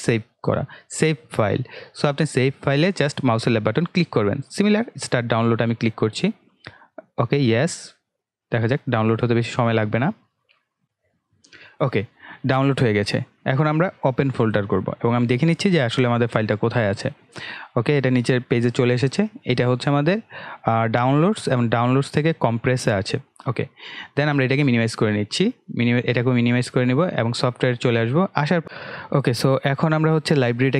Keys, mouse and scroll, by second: 28.6-30.7 drag.